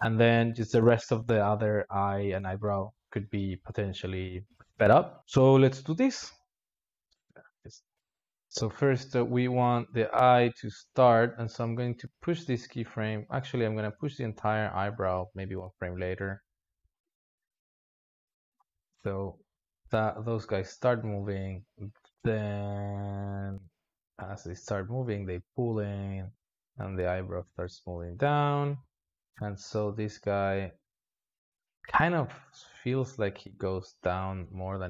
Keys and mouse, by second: 0.3-4.4 drag, 4.4 alt+shift+z, 5.2 space, 6.0 click, 6.7-8.1 drag, 8.1 alt+shift+z, 8.7-12.3 drag, 12.3 g, 13.8 alt+shift+z, 14.7 click, 16.9 a, 17.7 g, 18.6-19.5 drag, 19.5 alt+shift+z, 20.0-23.0 drag, 26.1-28.4 drag, 28.4 alt+shift+z, 29.0 click, 29.9-34.4 drag.